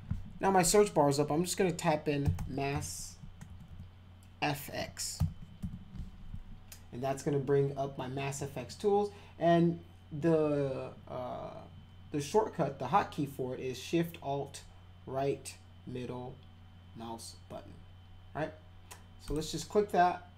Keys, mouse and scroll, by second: 2.0-3.7 typing, 5.1 f, 5.6 x, 19.3 click.